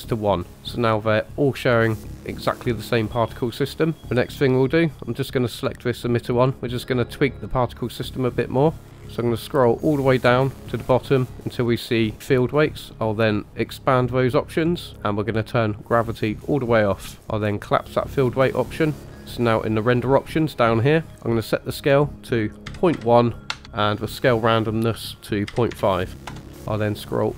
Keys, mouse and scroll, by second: 4.0 click, 5.2 click, 7.7-8.8 drag, 8.8-10.6 scroll down 12, 10.6-12.2 scroll down 4, 12.2 click, 12.2-13.2 scroll down 1, 13.7 click, 14.5-15.4 scroll down 2, 15.4-16.4 drag, 15.4-16.4 scroll down 1, 17.5 click, 19.1 scroll up 1, 19.2-19.7 scroll down 2, 21.1-21.6 scroll down 1, 21.6-26.3 drag, 21.6-24.2 scroll down 1, 26.4-27.3 scroll up 7.